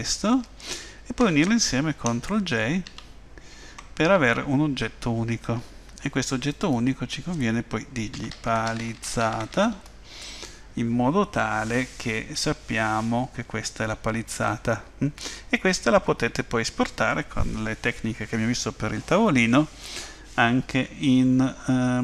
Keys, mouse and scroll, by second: 2.8 ctrl+j, 6.4 click, 6.6 click, 9.0 z, 14.5 middle click.